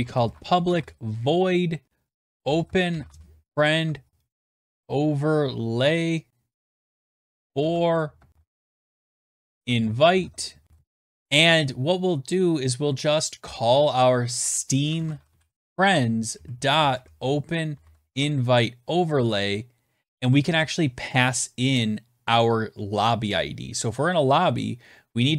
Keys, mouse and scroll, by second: 0.0-10.8 typing, 13.4-18.0 typing, 19.8-20.7 typing.